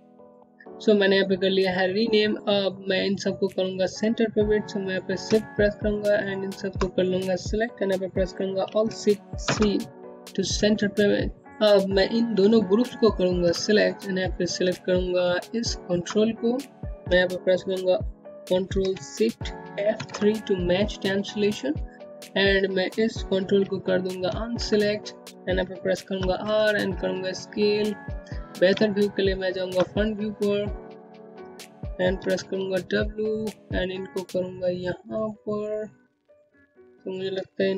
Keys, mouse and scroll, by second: 3.2 z, 4.2 shift+click, 7.4 alt+shift+c, 9.4 click, 11.3 ctrl+click, 13.2 shift+click, 17.9 ctrl+shift+F3, 23.6 ctrl+click, 24.3 r, 25.0 middle click, 27.0 space, 27.1 click, 27.4 space, 28.7 scroll up 1, 29.6 alt+middle click, 29.7-30.4 alt+scroll up 2, 30.4 w, 30.7 scroll up 1, 31.5 click, 34.4-35.9 scroll up 1, 35.9 r, 36.4 middle click.